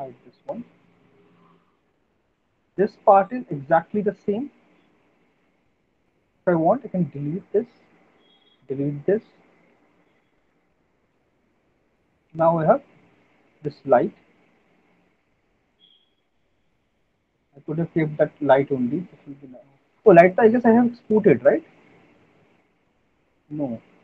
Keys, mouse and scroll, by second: 0.2 right click, 1.3 click, 2.1 alt+middle click, 2.3 middle click, 2.7 middle click, 3.0 alt+middle click, 3.7 middle click, 6.1 click, 6.8 Delete, 8.5 click, 8.6 Delete, 9.7 click, 9.9 Delete, 10.5 click, 10.7 Delete, 11.3 middle click, 11.5 middle click, 12.6 alt+middle click, 12.7 alt+middle click, 13.2 click, 13.7 alt+middle click, 13.7 click, 14.4 click, 15.3-16.9 middle drag, 17.5 right click.